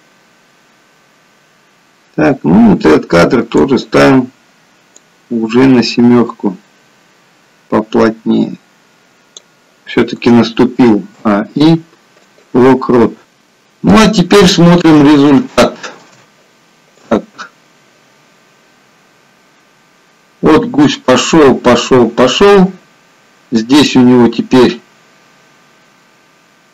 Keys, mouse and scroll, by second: 4.9 click, 10.6 a, 11.0 i, 13.2 scroll down 3, 13.5-14.9 scroll up 2, 14.9 shift+middle click, 17.2 click.